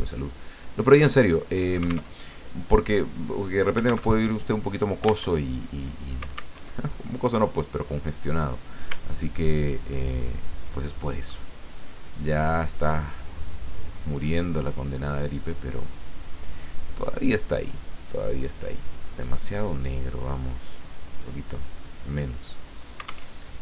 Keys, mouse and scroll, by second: 2.2 alt+Tab, 4.1 alt+Tab, 5.3 alt+Tab, 6.6 alt+Tab, 7.7 click, 9.1 ctrl+scroll down 2, 10.7 click, 12.7-16.6 drag, 17.2 click, 18.5-21.4 drag, 23.3 alt+Tab.